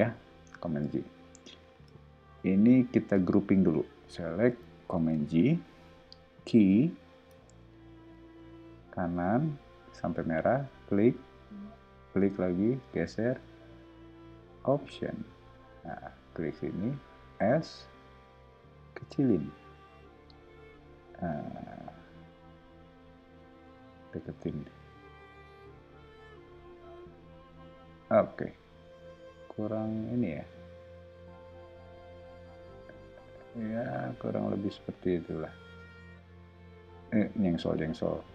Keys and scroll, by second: 4.9 super+g, 6.3 q, 7.4 Up, 8.1 Right, 17.2 s, 23.9 m.